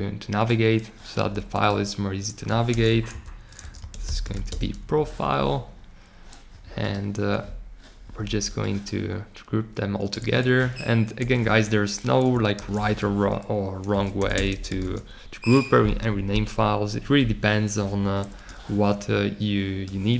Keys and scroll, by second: 2.6 super+r, 3.3-4.7 typing, 11.1 super+g, 12.5 super+r, 13.6-15.3 typing.